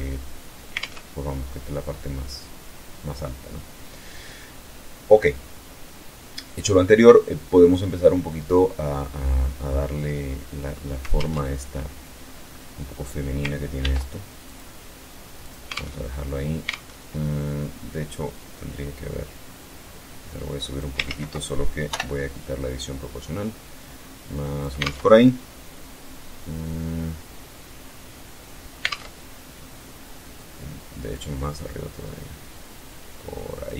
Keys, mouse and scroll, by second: 0.2 alt+Tab, 3.6-3.9 scroll up 1, 4.6-4.9 scroll up 1, 6.2-6.7 scroll down 1, 10.5 alt+Tab, 11.6-12.3 scroll up 1, 13.2 ctrl+r, 13.9 click, 14.8 alt+click, 15.2 alt+Tab, 16.1 alt+Tab, 19.0-20.3 drag, 20.4 ctrl+z, 21.3 o, 22.2-24.2 drag, 24.2 alt+Tab, 28.3 alt+Tab, 30.5-33.2 drag.